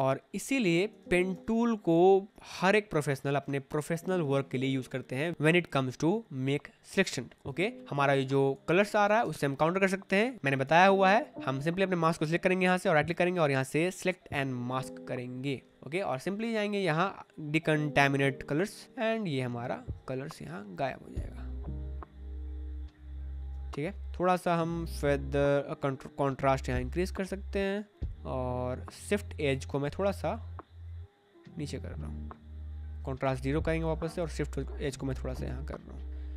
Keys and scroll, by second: 3.4 space, 9.1 space, 23.4 space.